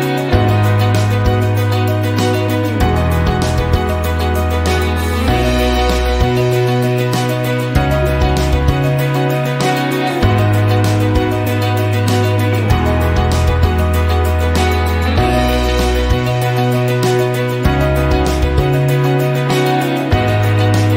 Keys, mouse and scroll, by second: 0.3 click, 3.0 click, 17.7 click.